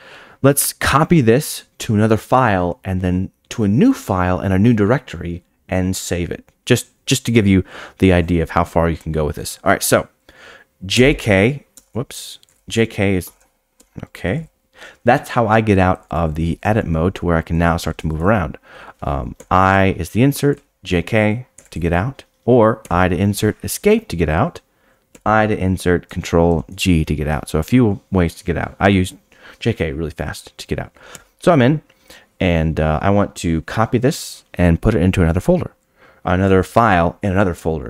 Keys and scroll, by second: 11.7 BackSpace, 11.9 BackSpace, 13.3 BackSpace, 13.8 BackSpace, 19.3 i, 22.8 i, 23.6 Escape, 25.1 i, 26.5 ctrl+g, 31.1 i.